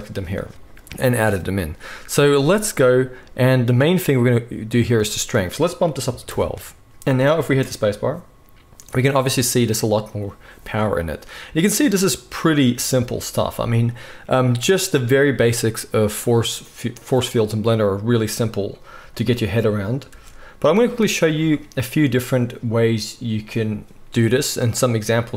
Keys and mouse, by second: 7.4 space, 20.1 space, 23.1-25.3 drag, 23.1-25.3 right drag.